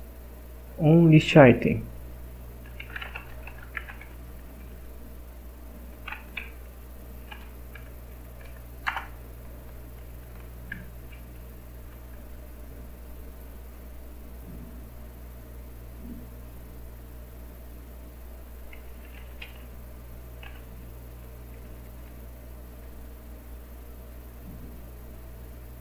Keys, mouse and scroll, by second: 2.5-4.8 typing, 5.9 Return, 6.3-8.2 typing, 8.9 Return, 10.2 shift+0, 11.5 Escape, 18.8-19.9 typing.